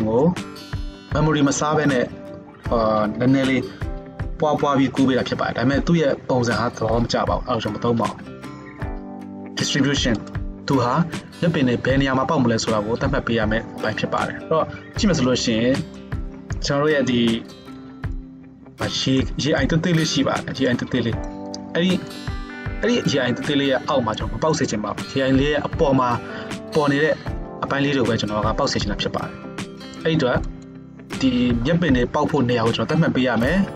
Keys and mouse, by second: 10.3-19.5 middle drag, 19.5 drag, 19.7-29.7 middle drag, 29.7 click, 29.9-33.7 middle drag.